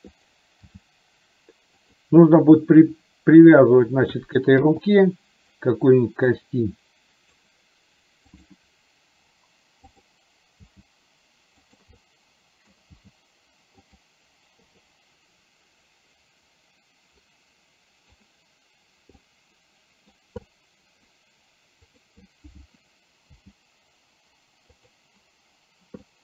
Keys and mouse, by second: 0.7 g, 6.4-7.5 drag, 8.4 click, 9.9 click, 10.8 g, 12.0 middle click, 13.0 g, 14.7 i, 16.4-18.3 drag, 19.2 middle click, 20.5 middle click, 21.8 click, 23.5 g, 26.1 middle click.